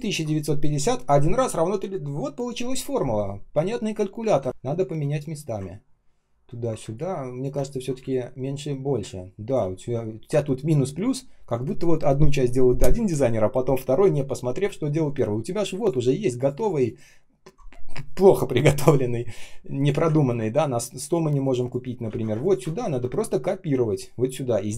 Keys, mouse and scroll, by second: 5.7-6.1 ctrl+scroll up 1, 6.4 ctrl+scroll down 1, 6.7-8.4 typing, 7.5 ctrl+scroll up 1, 9.6-10.4 ctrl+scroll down 1, 11.1-12.2 ctrl+scroll up 1, 15.5 space, 20.1-21.1 ctrl+scroll down 1, 22.0 ctrl+c, 22.2 space, 22.6 ctrl+scroll up 1, 22.8 ctrl+v.